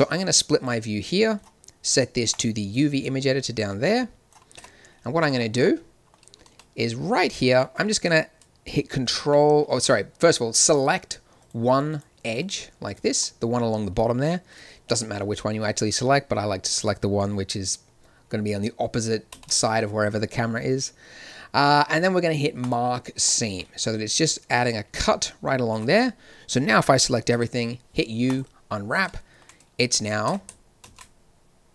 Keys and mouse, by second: 0.2 click, 4.5 click, 5.4 Tab, 5.4 middle click, 6.4 z, 14.4 click, 14.7-15.9 middle drag, 19.3 ctrl+e, 23.2-25.0 drag, 25.7 a, 25.9 a, 27.3 u, 30.2 Tab, 31.4 shift+z.